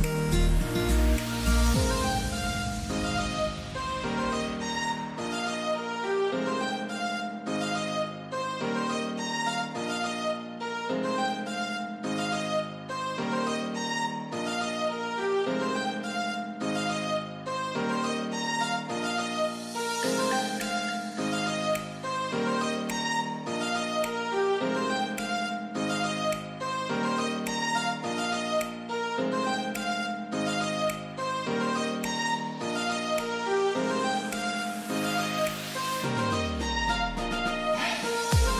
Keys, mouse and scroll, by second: 1.7 click, 7.2 click, 10.5 click, 11.2-11.9 scroll down 1, 16.1 F10, 17.2 click, 17.9-19.2 scroll down 1, 19.2 click, 20.1 right click, 21.3 click, 21.3 click, 24.1 click, 26.5 click, 30.5 click.